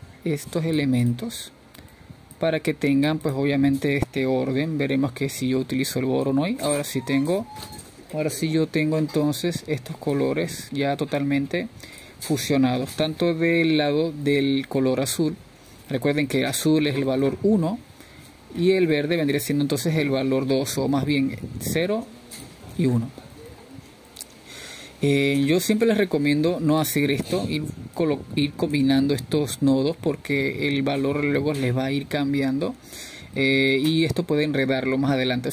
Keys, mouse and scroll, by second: 1.7 click, 3.0 click, 5.1-5.6 middle drag, 5.6 click, 6.5 drag, 9.6-15.6 drag, 15.6-25.6 middle drag, 25.6-30.7 drag, 31.2 click, 32.3-34.9 scroll up 3, 34.9-35.5 middle drag.